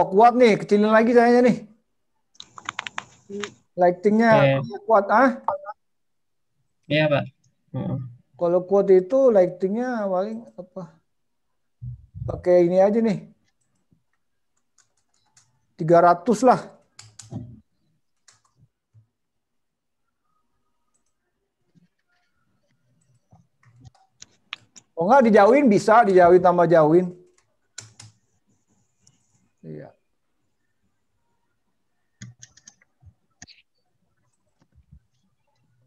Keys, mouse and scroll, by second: 7.9 click, 18.3 BackSpace, 18.3 0, 21.2 click, 29.2 0.